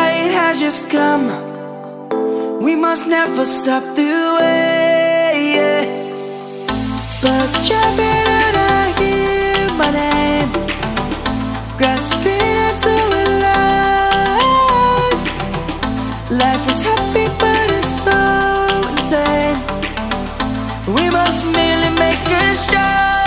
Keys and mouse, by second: 7.1 middle click, 9.0 1, 14.1 right click, 15.2 7, 19.0 click, 19.7 1, 23.1 shift+a.